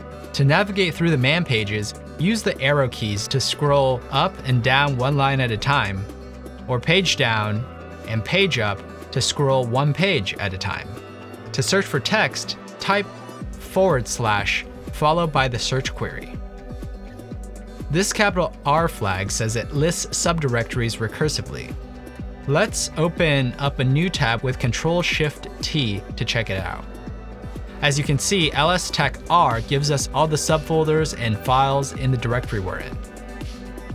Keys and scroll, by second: 3.0-3.7 typing, 3.8 Down, 3.9 Down, 4.0 Down, 4.4 Up, 4.9 Up, 4.9 Up, 5.1 Up, 5.2 Up, 5.3 Up, 7.6 Page_Down, 8.5 Page_Down, 8.8 Page_Up, 10.7 Page_Up, 13.3 /, 15.6 -, 16.2 shift+r, 16.4 Return, 17.8 Return, 23.7 ctrl+shift+t, 27.2-28.6 typing, 28.9 Return, 29.8 Return.